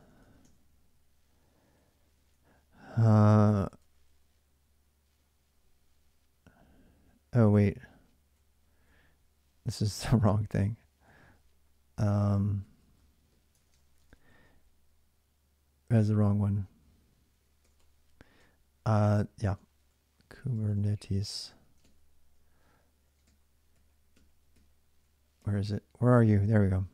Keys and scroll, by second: 0.0-2.1 typing, 3.1 ctrl+[, 3.3-4.3 typing, 6.6-11.3 typing, 13.3-14.7 typing, 16.2-25.2 typing, 26.4-26.9 typing.